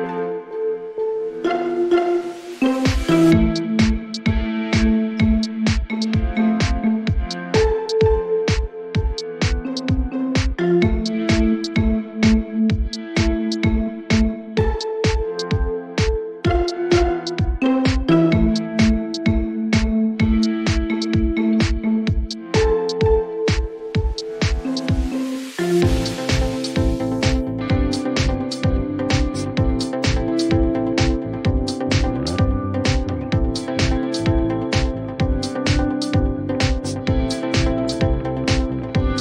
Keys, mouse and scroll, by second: 0.5 Return, 1.2 ctrl+d, 3.1 click, 3.9 right click, 4.8 click, 5.5-8.9 typing, 7.0-8.1 drag, 9.1 Return, 12.1 right click, 15.1 click, 15.7-16.8 drag, 22.6 click, 24.4 click, 24.9 s, 26.6 click, 27.5 click, 28.2-29.6 typing, 34.4 click, 35.3 click, 36.8 t, 38.9 click.